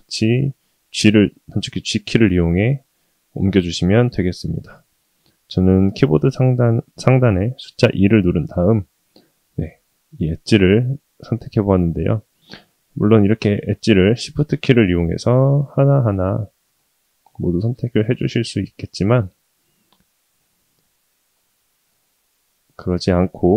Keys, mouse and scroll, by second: 8.7 click, 9.5-12.7 middle drag, 13.4 shift+click, 13.9-14.7 shift+middle drag, 14.8-15.2 middle drag, 15.6 shift+click, 16.0-16.6 shift+middle drag, 16.8-17.3 middle drag, 18.6 shift+click, 19.0-19.6 middle drag, 19.9-20.2 middle drag, 20.4 middle drag, 20.9 shift+middle drag, 21.3 click, 22.1-22.9 middle drag.